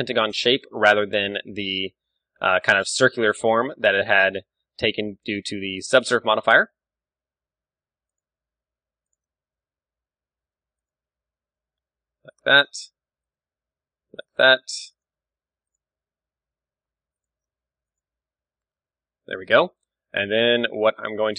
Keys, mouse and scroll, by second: 3.2-4.7 drag, 3.4 ctrl+r, 5.3-7.0 drag, 6.7 ctrl+e, 9.2-10.9 drag, 9.5 ctrl+e, 10.5 ctrl+r, 12.7-14.3 drag, 13.0 ctrl+r, 15.1-16.8 drag, 15.4 ctrl+r, 17.3-19.0 drag, 17.7 ctrl+r, 19.5 click, 19.6 a, 19.7 middle click, 20.7 middle click, 21.2-21.3 middle drag.